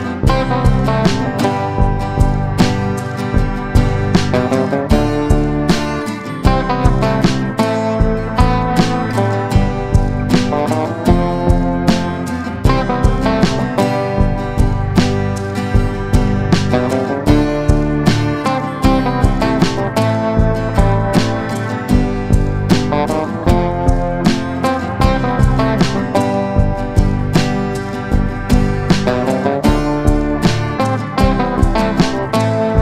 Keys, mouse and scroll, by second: 2.3 shift+click, 2.9 click, 7.8-28.3 drag, 29.8 right click, 30.5 click.